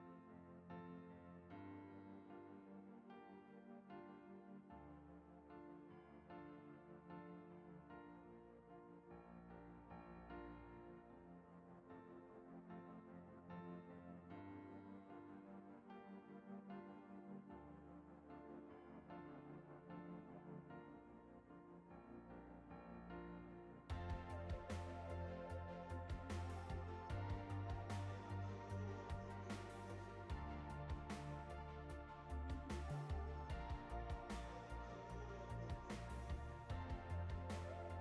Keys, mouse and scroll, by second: 0.9 click, 2.4 click, 6.6-12.0 drag, 12.6-15.7 drag, 16.7 click, 18.0 click, 35.1-35.5 drag, 36.1-36.5 drag, 37.4 click.